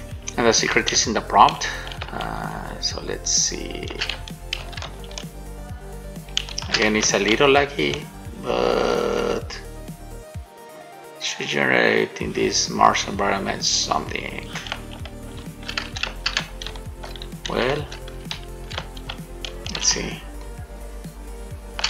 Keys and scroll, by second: 1.2 shift+a, 2.3 shift+a, 4.8 s, 7.5 shift+a, 15.7 shift+w, 16.3 w, 16.9 shift+w, 17.9 w, 18.6 d, 19.3 shift+a, 20.1 shift+d.